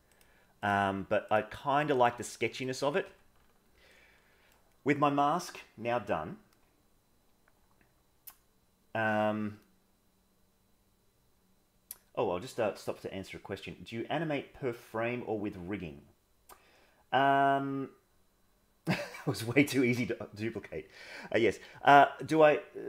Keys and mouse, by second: 1.9 click, 3.0 Tab, 3.8 middle click.